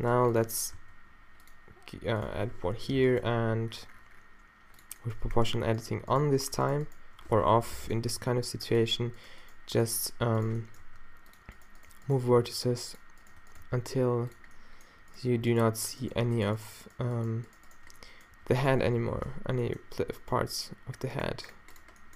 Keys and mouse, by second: 0.2 ctrl+r, 0.8 s, 2.8 o, 3.0-3.3 drag, 3.3 g, 4.9-6.8 drag, 7.6 o, 8.1 g, 9.2-10.6 drag, 10.9 g, 11.4-13.6 drag, 12.4 g, 13.6 g, 14.4 click, 14.8-16.5 middle drag, 18.4 shift+g, 19.0 o, 20.3 g.